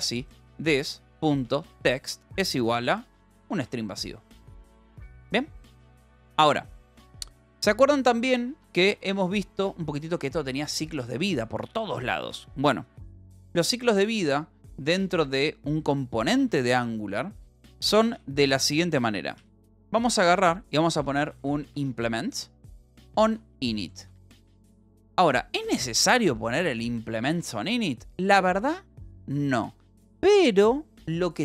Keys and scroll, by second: 0.0-2.1 typing, 4.1 ctrl+s, 6.7 ctrl+s, 7.7 l, 8.1 k, 9.6 j, 10.5 k, 11.5 k, 13.4 space, 13.9 a, 14.9 Escape, 15.3 l, 15.7 j, 16.3 k, 16.3 Escape, 16.7 k, 17.9 f, 18.6 {, 19.3 i, 20.7-24.3 typing, 24.7 ctrl+s, 25.9-28.2 typing, 27.9 ctrl+s, 31.1 j.